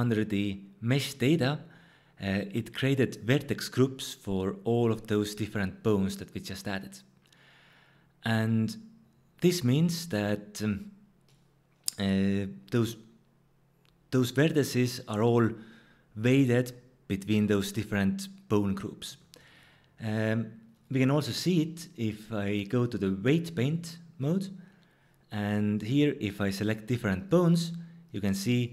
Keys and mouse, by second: 20.7-23.7 drag, 27.1-28.7 drag.